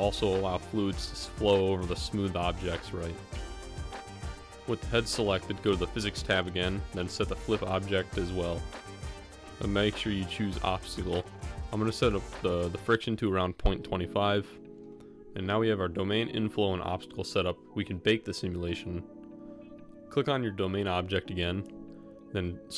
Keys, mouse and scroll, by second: 7.1 click, 8.3 click, 9.1-10.3 drag, 11.6-14.1 drag, 20.7 middle click.